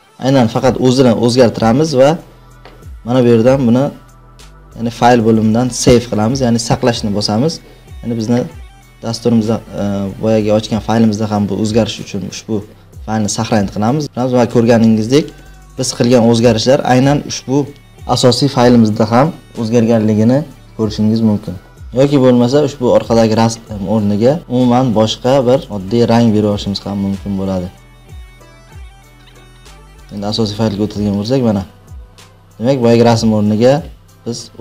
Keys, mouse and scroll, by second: 3.2-6.0 drag, 7.3 click, 9.4 click, 14.1-16.0 drag, 22.0-23.6 drag, 25.6 click, 25.7 click, 27.9 click, 28.1 click, 28.4 click, 28.7 click, 28.9 click, 29.2 click, 29.4 click, 29.4 ctrl+s, 30.3-32.9 drag.